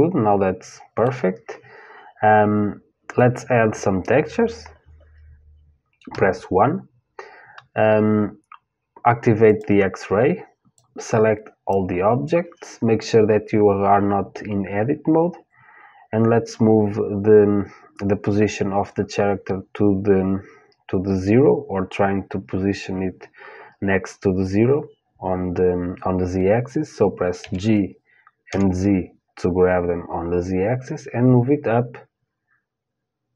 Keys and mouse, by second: 5.7 KP_1, 9.1-15.5 drag, 27.0 g.